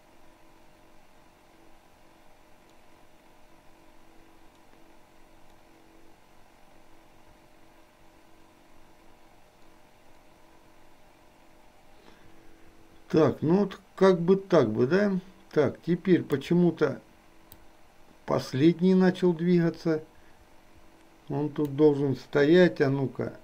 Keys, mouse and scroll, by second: 17.7-21.9 drag.